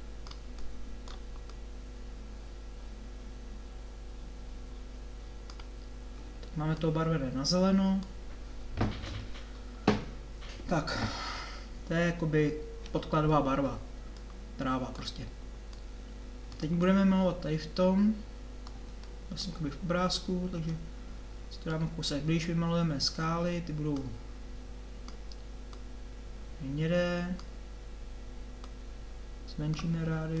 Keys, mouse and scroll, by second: 1.7-4.8 drag, 15.1-17.4 middle drag, 19.6 middle click, 22.5 middle click, 24.0-30.4 drag.